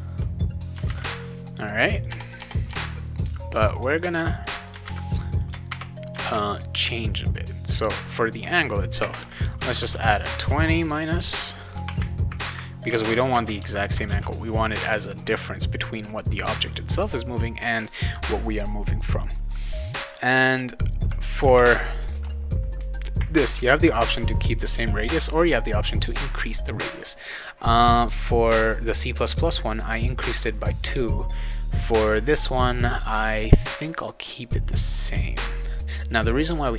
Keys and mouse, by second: 0.8 ctrl+v, 1.8 click, 2.4 BackSpace, 2.7 BackSpace, 3.7 click, 3.9 click, 4.1 ctrl+c, 4.4 click, 4.5 click, 4.8 ctrl+v, 5.2 click, 5.4 click, 5.7 ctrl+v, 6.2 ctrl+s, 8.1 click, 9.0-10.4 typing, 10.5 ctrl+s, 12.8-14.3 typing.